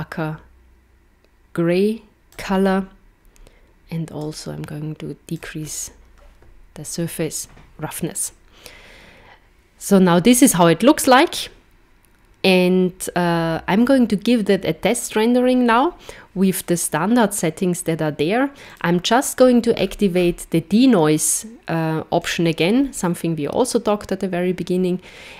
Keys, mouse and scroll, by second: 4.3 click, 18.7 click, 19.7-21.6 scroll down 10, 22.2 click.